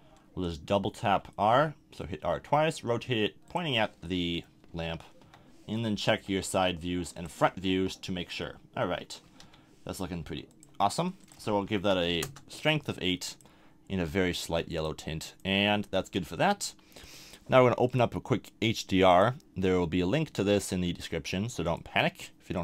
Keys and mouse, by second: 1.0 r, 3.5-4.4 drag, 4.7 KP_1, 5.2 KP_3, 6.2 r, 7.7 KP_1, 9.4 KP_3, 10.2 r.